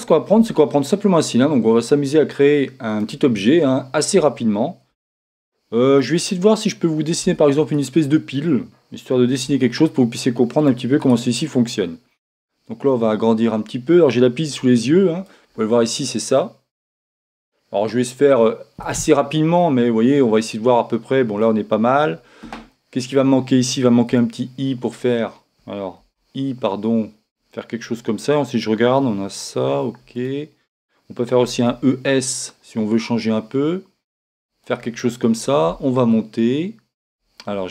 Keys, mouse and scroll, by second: 0.3 shift+a, 3.7-5.9 middle drag, 4.9 s, 7.2 Tab, 8.1-9.6 right drag, 9.4 ctrl+Tab, 11.0-12.9 right drag, 12.9-14.6 drag, 20.3-22.3 middle drag, 22.7-24.7 middle drag, 24.1 o, 26.0 i, 30.3-32.0 drag, 31.4 e, 34.6-37.7 drag.